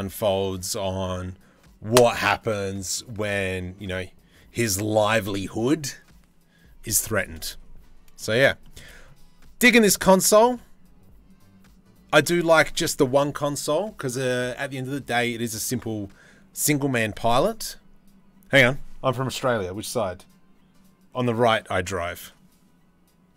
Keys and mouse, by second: 7.8 middle click, 8.2 shift+middle click, 9.8 middle click.